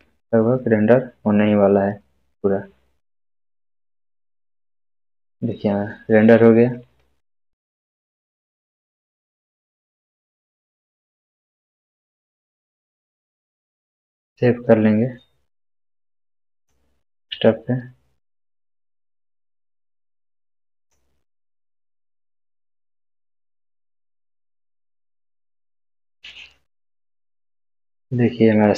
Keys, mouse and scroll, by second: 8.2 click, 14.1 click, 20.8 click.